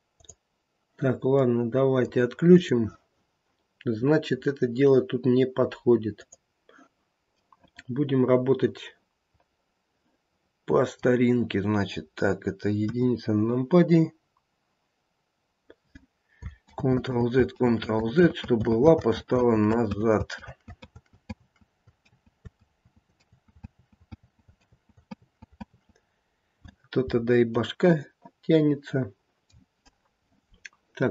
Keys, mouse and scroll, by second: 0.1 click, 1.4 middle click, 2.5 click, 4.3-5.6 scroll down 1, 5.6-6.2 scroll down 1, 6.2 click, 7.4 middle click, 9.6 middle click, 12.8 KP_1, 13.6 scroll up 1, 14.2-15.9 scroll down 1, 16.7 ctrl+z, 17.1 ctrl+z, 17.5 ctrl+z, 18.0 ctrl+z, 18.4 ctrl+z, 19.4 ctrl+z, 19.9 ctrl+z, 20.4 ctrl+z, 20.9 ctrl+z, 21.3 ctrl+z, 22.0 ctrl+z, 22.7 ctrl+z, 23.2 ctrl+z, 23.7 ctrl+z, 24.1 ctrl+z, 24.6 ctrl+z, 25.1 ctrl+z, 25.7 ctrl+z, 27.4 scroll down 1, 27.7 middle click, 29.0 middle click.